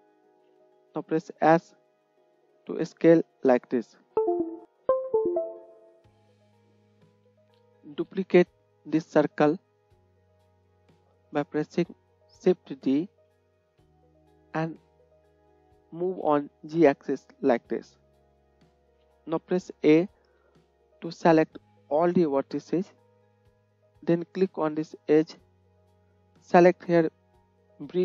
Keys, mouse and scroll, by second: 1.2 s, 7.1 KP_1, 10.3 shift+d, 18.7 KP_1, 20.5 a, 25.5-28.0 right drag.